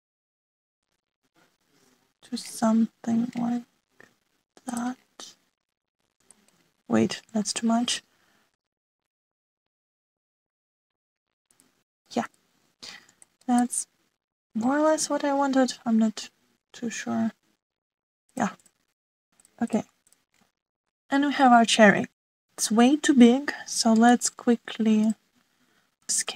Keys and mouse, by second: 7.2 shift+middle click, 8.4 ctrl+z, 9.5 s, 13.2 /, 14.2 shift+middle click, 14.6 middle click, 16.8 s, 20.3 click, 21.0 right click, 25.0-25.4 shift+drag, 25.7-26.3 middle drag.